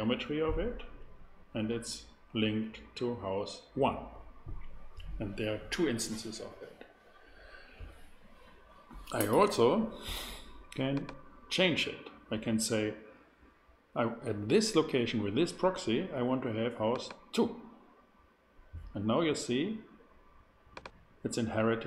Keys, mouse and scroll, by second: 10.9 click, 20.7-21.8 drag.